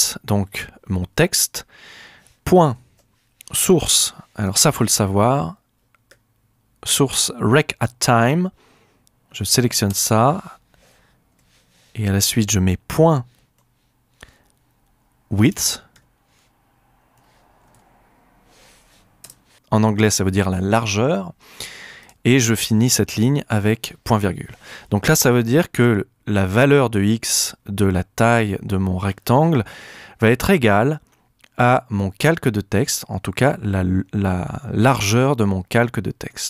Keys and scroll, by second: 2.7-4.9 typing, 9.9 Return, 11.3 Right, 12.2 shift+Right, 13.0 shift+;, 15.4-18.2 typing, 19.2 Return, 23.5 ;.